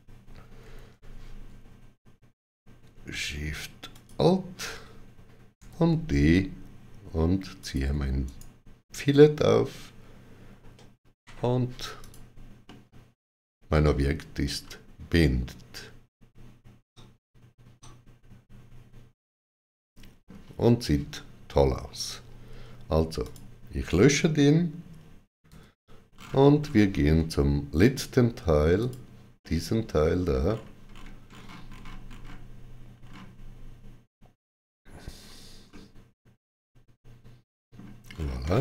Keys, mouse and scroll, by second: 0.4 ctrl+z, 3.2 ctrl+alt+shift+z, 3.2 alt+shift+click, 3.7 alt+shift+click, 5.4 d, 7.4 alt+shift+click, 8.1 right click, 10.5 shift+w, 11.9 click, 12.8 middle click, 21.9 shift+w, 23.1 click, 25.3 x, 26.0-26.4 scroll down 2, 28.6 click, 29.6 middle click, 30.3-30.8 scroll up 3, 35.5 middle click, 37.9-38.3 scroll down 2.